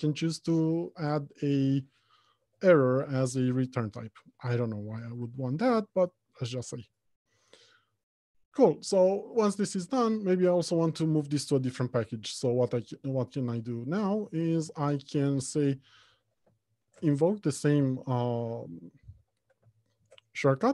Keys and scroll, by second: 5.3 Return, 17.3 ctrl+alt+shift+t.